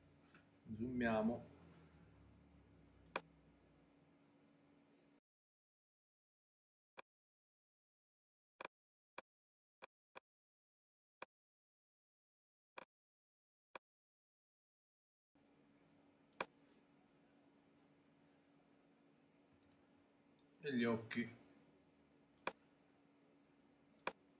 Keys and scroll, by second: 19.6 super+-.